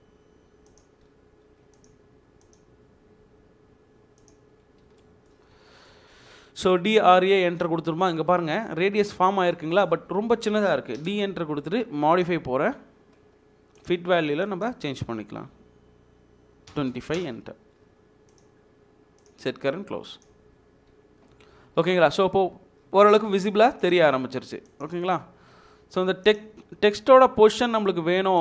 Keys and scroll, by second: 4.8 Escape, 11.1 d, 11.1 space, 16.7 typing, 17.2 Return.